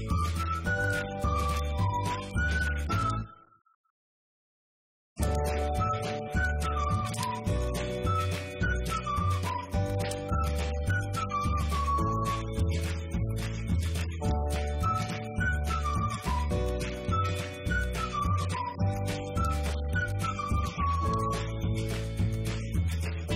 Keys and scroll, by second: 0.9 Delete, 1.4 Right, 1.5 Left, 2.1-3.6 typing, 4.0 Left, 4.1 Down, 4.8 Left, 5.0 Down, 5.1 Left, 5.3 Down, 5.4 Left, 5.8 Up, 6.2 Left, 6.3 Up, 7.3-12.4 typing, 14.8-16.1 typing, 16.4 Up, 18.4-21.6 typing.